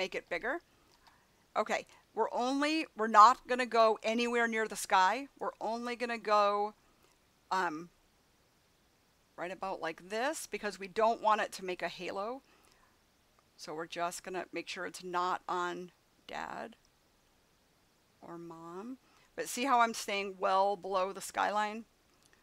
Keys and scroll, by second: 0.8 [.